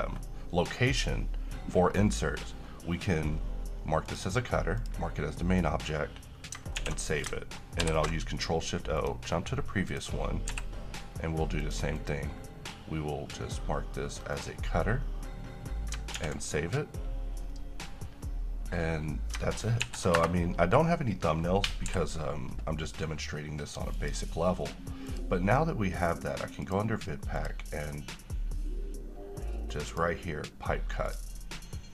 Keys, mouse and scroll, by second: 4.2 click, 4.2 click, 6.9 s, 8.0 ctrl+o, 9.1 click, 10.7 n, 11.7 click, 14.5 click, 16.3 s, 20.0 ctrl+n, 20.2 Return, 21.4-22.1 middle click, 22.1 n, 24.1 click, 30.0 click.